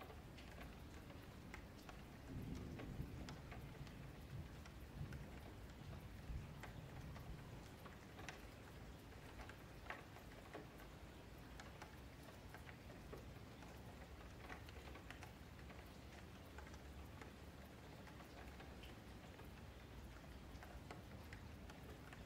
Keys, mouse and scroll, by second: 0.1 click, 1.2 click, 2.2 ctrl+z, 2.4 ctrl+z, 2.6 ctrl+z, 3.6 ctrl+shift+z, 4.2 click, 5.4 click, 6.0 click, 7.3 click, 9.1 click, 10.6 click, 12.3 click, 12.7 g, 13.9 click, 14.8-16.9 drag, 16.9 Tab, 18.1 l, 18.3 l, 19.7 ctrl+z, 20.4 ctrl+z, 20.7 click, 21.5 ctrl+KP_Add.